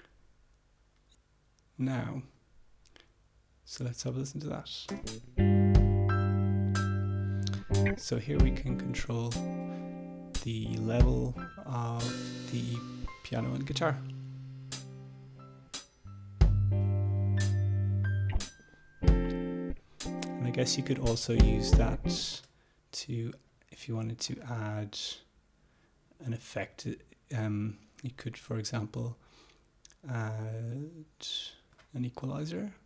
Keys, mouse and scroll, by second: 0.3 click, 1.2 click, 5.1 space, 8.5-18.8 drag, 22.5 space, 24.0 click, 24.4 right click, 31.9 click.